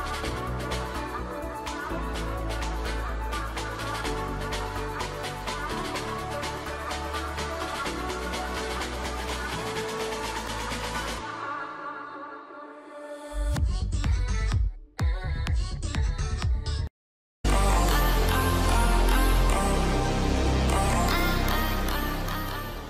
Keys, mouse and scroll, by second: 5.7 ], 13.7 alt+scroll up 1, 15.5 alt+scroll down 1.